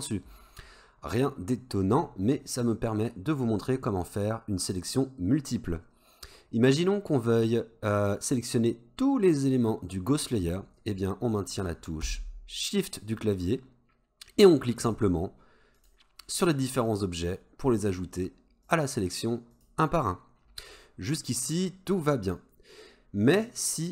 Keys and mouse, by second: 1.2 click, 14.8 shift+click, 15.8 shift+click, 16.9 shift+click, 17.9 shift+click, 18.7 shift+click, 19.6 shift+click.